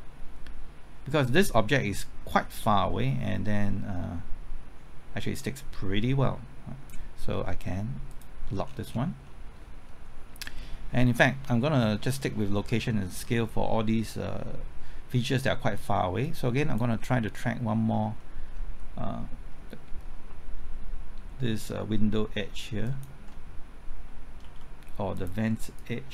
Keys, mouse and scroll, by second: 8.7 scroll down 1, 9.3 middle click, 9.7-12.0 scroll up 1, 16.2 click, 18.2-20.3 scroll up 1, 20.3 typing, 22.8 ctrl+click, 24.4 s, 25.2-26.1 drag.